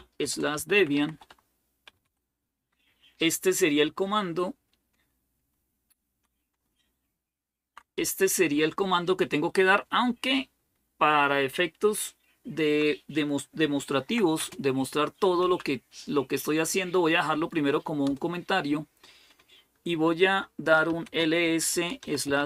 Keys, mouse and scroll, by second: 0.0-2.3 typing, 5.3-6.1 Left, 6.4-7.6 Right, 7.8 Left, 8.5 Left, 8.5-12.6 Left, 13.7 #, 14.2 space, 15.2 End, 15.6 Down, 17.6 typing, 17.8 Return, 20.3-22.4 typing.